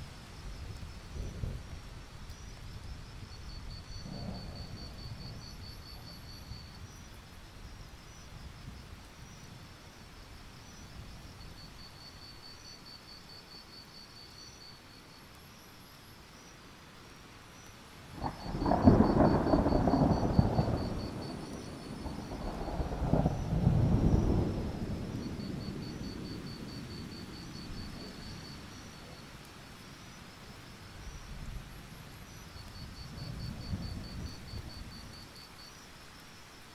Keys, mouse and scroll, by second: 0.4-2.4 alt+drag, 2.4 alt+scroll up 1, 2.9 click, 3.8 alt+scroll down 1, 3.9 scroll up 1, 4.2 ctrl+scroll down 1, 4.4 alt+scroll up 1, 4.7 click, 5.2 shift+click, 5.5 shift+click, 5.7 shift+click, 5.9 scroll up 1, 7.5 shift+click, 7.7 scroll up 1, 8.4 shift+click, 8.6 right click, 10.4 click, 10.9-11.5 scroll down 1, 11.5-11.9 alt+scroll down 1, 12.0-12.5 alt+scroll up 2, 12.5 scroll down 1, 12.8-13.8 alt+scroll up 2, 13.8-15.5 scroll down 1, 15.5 click, 15.7 alt+scroll up 1, 17.2 click, 19.1 ctrl+z, 23.3-23.8 scroll up 1, 23.8-25.9 drag, 27.3 alt+scroll down 1, 27.5 scroll up 1, 27.7 right click, 28.3-28.7 scroll up 1, 28.7 click, 28.9-29.8 scroll up 1, 29.9 shift+click, 30.1 scroll up 1, 30.6 shift+click, 30.8-31.3 scroll down 1, 31.3 right click, 32.9 click, 33.4-33.8 scroll down 2, 33.8 click, 34.0-34.4 alt+scroll up 1, 34.4-36.7 drag.